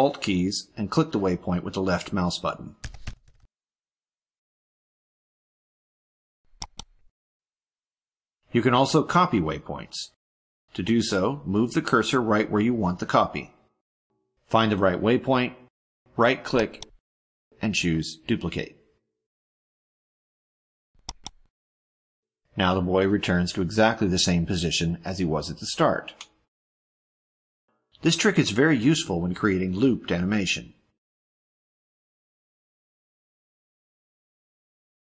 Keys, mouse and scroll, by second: 6.5 ctrl+alt+click, 9.0-11.7 drag, 16.3 click, 17.3 right click, 21.0 click, 27.2 click, 29.0 click.